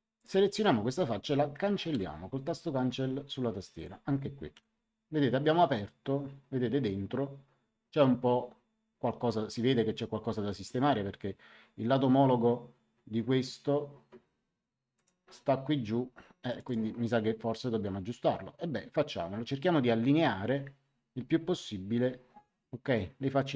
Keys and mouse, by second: 0.1 click, 1.9 Delete, 3.7 click, 4.5 Delete, 14.9 click, 16.4 click.